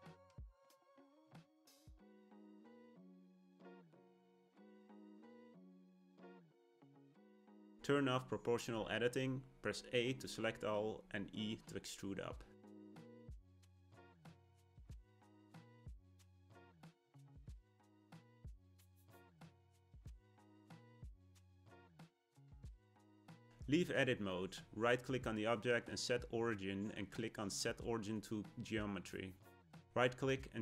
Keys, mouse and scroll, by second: 0.9 click, 1.3-5.3 middle drag, 5.3 a, 8.4 click, 11.3 e, 17.8-20.9 middle drag, 22.3 Tab, 24.7-27.9 right drag, 28.8-30.6 right drag.